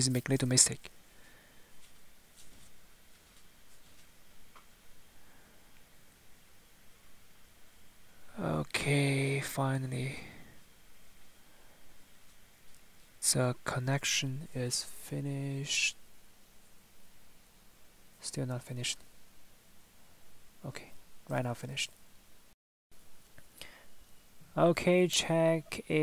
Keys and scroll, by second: 15.3 Escape, 24.5 Tab.